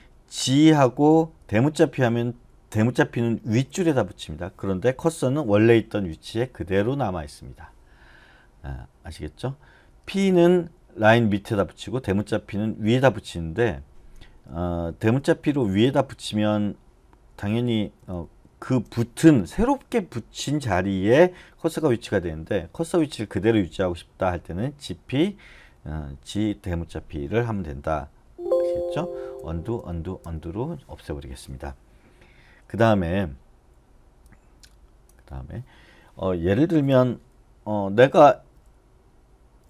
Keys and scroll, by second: 3.5 shift+p, 9.6-10.7 typing, 12.8 shift+[, 15.3 j, 15.6-16.4 j, 17.6-18.2 typing, 28.2 Escape, 29.3 u, 29.7 u, 38.4 j, 38.6-39.6 j.